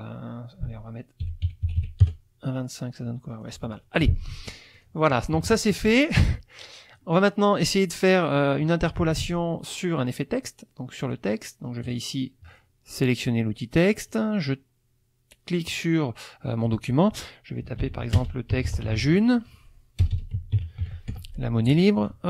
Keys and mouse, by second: 1.2 KP_1, 1.5 KP_Decimal, 1.7 KP_2, 1.9 KP_5, 2.0 KP_Enter, 3.4 click, 4.5-5.0 drag, 5.3 KP_Subtract, 6.4 click, 7.5 middle click, 7.9 middle click, 11.0 click, 11.8 click, 14.0 click, 15.7 click, 17.8-20.8 typing, 21.1 shift+F1.